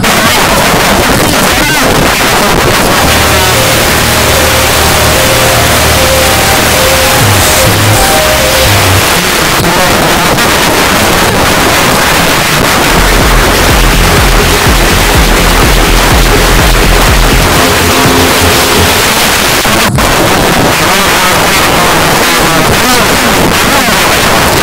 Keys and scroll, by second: 9.0 Page_Down, 19.0 Page_Down.